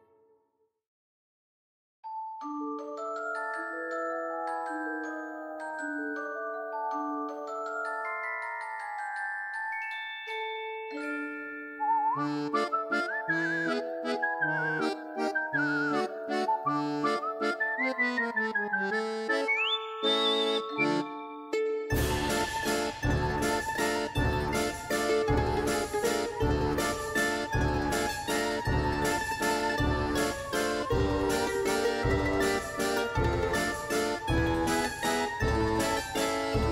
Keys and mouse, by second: 1.7 click, 2.7 click, 2.8 click, 3.0 click, 3.2 click, 3.8 click, 5.1 click, 6.3 shift+a, 7.1 s, 8.7 s, 9.2 click, 11.6 Tab, 11.7 click, 12.0 shift+click, 12.3 click, 12.6 shift+click, 12.7 shift+click, 13.2 e, 13.6 click, 14.0 shift+click, 14.1 shift+click, 14.4 ctrl+b, 15.1 click, 15.2 click, 15.7 Tab, 15.7 right click, 16.8 click, 16.9 click, 17.4 click, 17.6 click, 17.9 click, 18.2 shift+click, 19.2 shift+d, 19.4 click, 21.9 r, 22.5 s, 23.2 click, 23.6-24.0 drag, 24.2 click, 24.6 click, 25.4 click, 25.9 click, 26.2 ctrl+z, 26.4 click, 28.0 click, 28.4 click, 28.6 shift+click, 28.8 click, 29.4 click, 32.2 shift+f, 36.6 click.